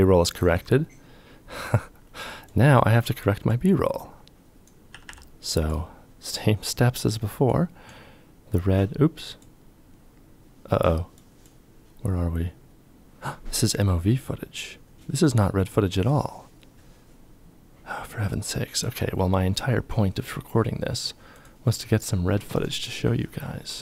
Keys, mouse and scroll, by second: 4.5 g, 4.6 g.